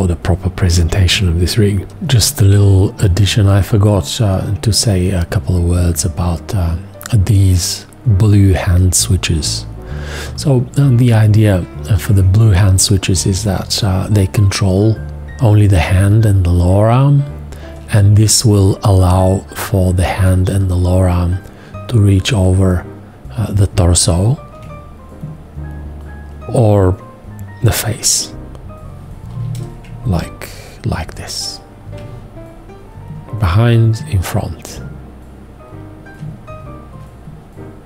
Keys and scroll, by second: 28.3 h, 29.3 h.